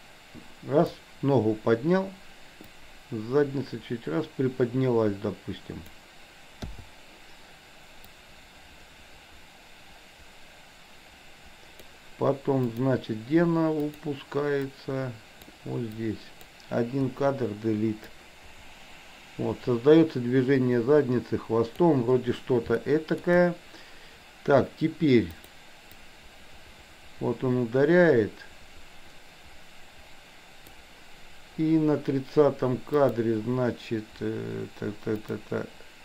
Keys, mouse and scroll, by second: 2.7 click, 3.0-6.0 drag, 6.7 i, 8.3-12.0 drag, 12.5 click, 13.9 click, 14.8 click, 16.0-16.4 drag, 17.0 Delete, 18.3-21.9 drag, 22.8-23.2 shift+middle drag, 25.5 click, 26.0-30.9 drag, 32.9 click, 35.2 click.